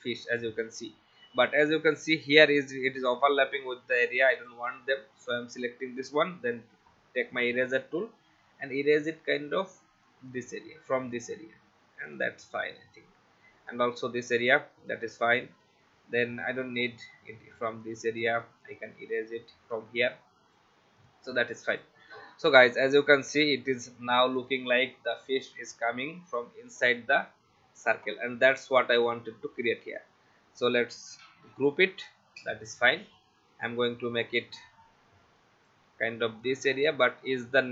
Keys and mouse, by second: 4.3 click, 6.0 shift+e, 10.0 click, 12.1 click, 13.7 click, 14.7 v, 15.9 shift+e, 16.8 click, 18.7 click, 20.1 v, 20.5 click, 21.7 click, 23.6 click, 29.0 click, 31.3 ctrl+g, 32.4 click, 37.0 click.